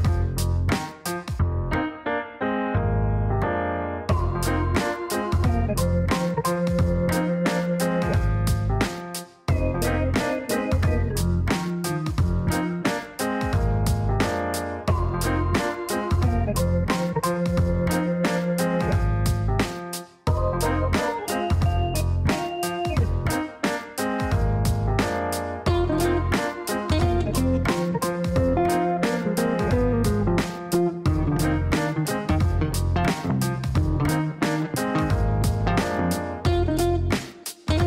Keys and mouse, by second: 0.2 click, 0.4 space, 0.9 click, 1.8 click, 2.3 click, 2.8 space, 7.3 click, 8.2 click, 11.1 click, 13.8 click, 15.0 click, 16.0 click, 16.4 space, 17.2 click, 20.0 space, 21.3 click, 24.3 ctrl+s, 26.3 click, 28.8 click, 29.7 click, 32.1 click, 33.3 click, 34.2 click, 36.0 click.